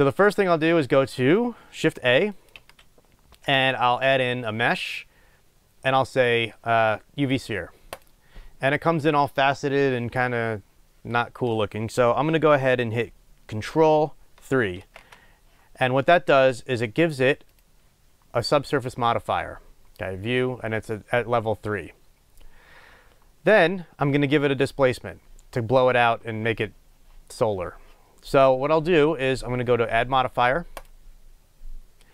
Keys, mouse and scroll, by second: 2.3 shift+click, 2.5 shift+a, 8.5 scroll up 1, 14.8 ctrl+3, 17.4 click, 30.7-32.1 drag.